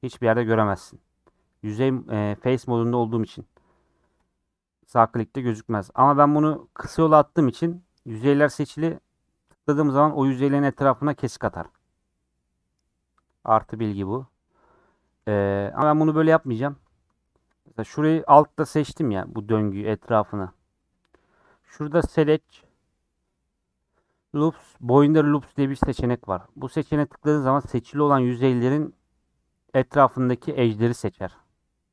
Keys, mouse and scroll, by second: 7.9 scroll up 2, 13.5-14.6 middle drag, 14.6 scroll down 2, 14.8 middle click, 15.1 ctrl+z, 15.4-16.5 middle drag, 16.5 click, 18.9-31.9 middle drag.